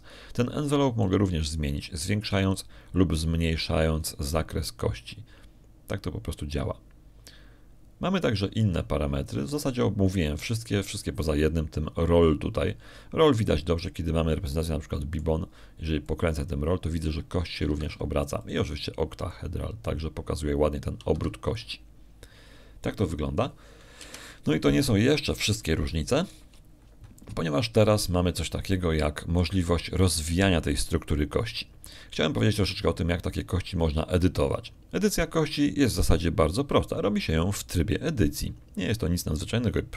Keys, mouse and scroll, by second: 2.9-10.7 shift+drag, 15.6 click, 16.4 middle click, 17.9-20.0 drag, 19.6 Escape, 20.3 click, 21.2-23.6 drag, 23.0 Escape, 25.8 1, 27.0 scroll down 2, 27.5 shift+click, 30.2 scroll down 2, 30.6 shift+click.